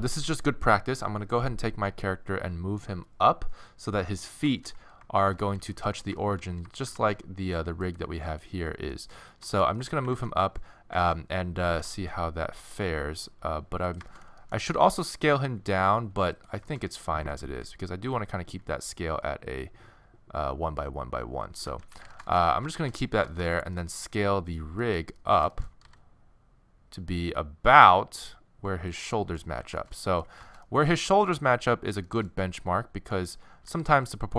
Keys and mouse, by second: 4.2-5.2 middle drag, 5.2 shift+1, 5.6 z, 7.0 alt+shift+1, 7.9 click, 10.2 ctrl+z, 11.0 ctrl+z, 11.8 g, 14.1 click, 14.8 s, 17.6 n, 21.6 n, 21.9 z, 25.9 s, 26.3-27.5 drag, 29.2-33.1 middle drag, 29.6 z, 33.7 s.